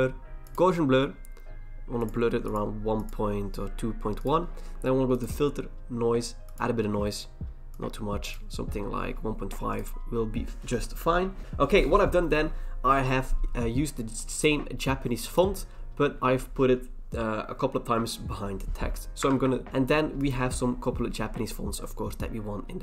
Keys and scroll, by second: 19.3 ctrl+v, 19.7 ctrl+c.